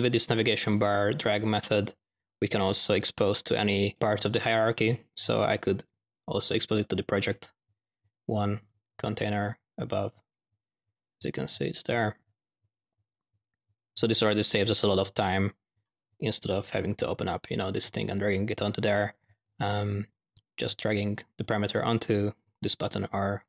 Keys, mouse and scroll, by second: 3.9-5.1 drag, 5.1 typing, 7.3 click, 8.5 click, 9.2 click, 11.2-14.4 drag, 21.6-23.4 drag.